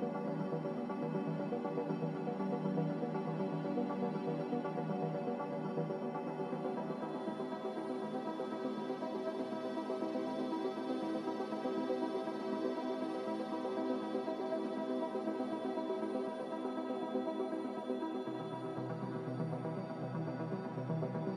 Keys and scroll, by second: 4.0 b, 4.8 Delete, 5.3 Delete, 6.3 n, 16.1 z, 19.0 a, 20.8 z.